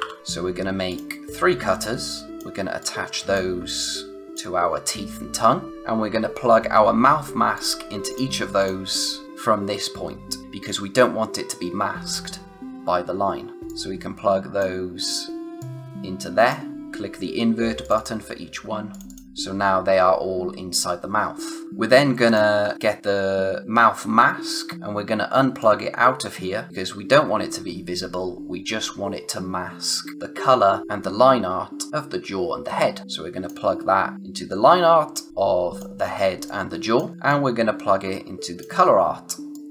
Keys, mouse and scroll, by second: 0.0-0.4 typing, 0.8 click, 2.8 click, 3.6 click, 7.5 click, 13.6 click, 21.6 space, 22.6 space, 22.6-23.9 scroll up 1, 24.4 space, 24.5 click, 26.7 space, 34.1 click, 36.2 space, 36.4 click, 36.7 space, 37.2 click.